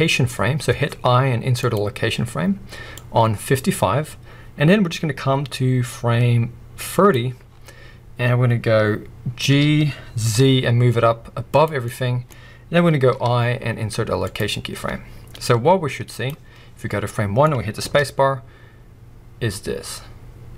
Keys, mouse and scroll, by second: 2.9-11.6 drag, 7.4-7.8 scroll down 2, 9.4 g, 11.8-15.4 middle drag, 12.3-13.1 scroll up 2, 15.4-17.8 drag, 17.0-17.8 scroll up 2, 18.0-20.5 middle drag.